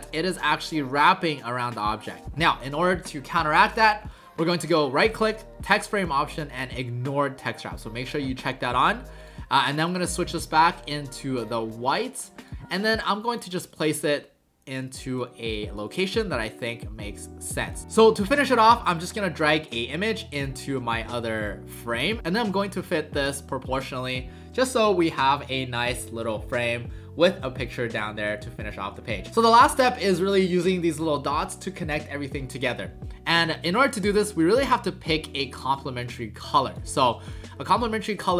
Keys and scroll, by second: 10.0 ctrl+a.